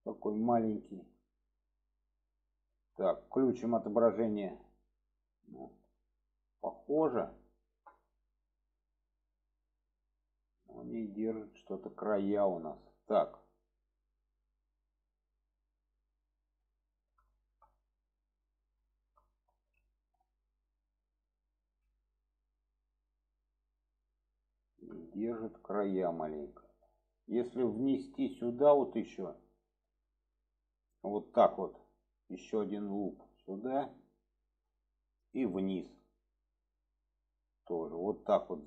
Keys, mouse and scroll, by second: 2.0 middle click, 4.4 click, 5.1 middle click, 6.6 shift+middle click, 7.6 shift+middle click, 11.8 shift+middle click, 12.9-15.3 middle drag, 15.9-17.1 middle drag, 17.3 shift+middle drag, 18.9 shift+middle click, 21.6 alt+z, 22.4-24.5 middle drag, 25.1 shift+middle drag, 26.0-26.6 middle drag, 27.1 middle click, 28.6 click, 29.1 middle click, 30.4-33.6 drag, 33.9-34.8 middle drag, 35.1 middle click, 36.3-38.0 drag, 38.4 click.